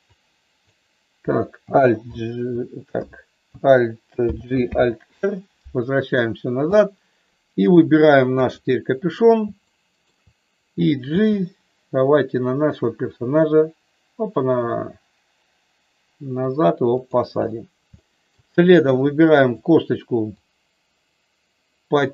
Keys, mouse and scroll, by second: 0.0 click, 2.0 alt+h, 3.0 BackSpace, 4.2 alt+g, 4.7 alt+r, 6.7 click, 7.5 click, 8.3 KP_3, 9.7 shift+middle click, 11.1 g, 18.0 shift+middle click, 19.1 click, 20.4-22.1 drag.